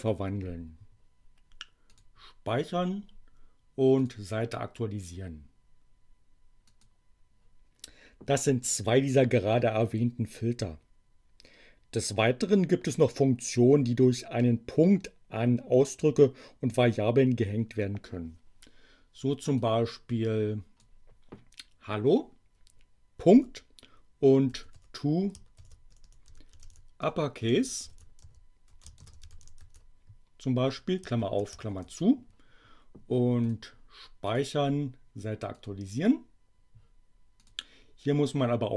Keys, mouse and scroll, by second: 1.9 click, 2.6 click, 3.9 click, 6.6 click, 19.5-21.0 drag, 23.2 ., 24.4-30.1 typing, 31.2 shift+8, 31.6 shift+9, 33.4 click, 34.2 click, 35.5 click, 37.3 click.